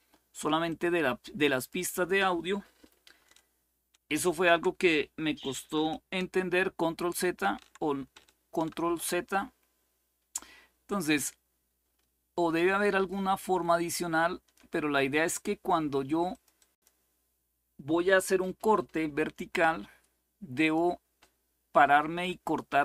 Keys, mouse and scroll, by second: 0.4-2.1 drag, 6.9 ctrl+x, 8.4 ctrl+z, 12.3-14.9 shift+drag, 16.0-17.2 drag, 20.3 click.